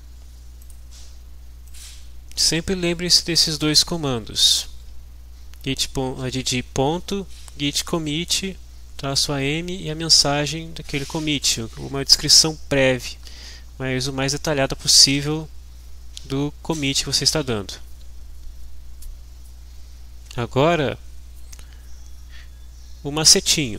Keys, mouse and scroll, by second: 0.6 click, 1.9 click.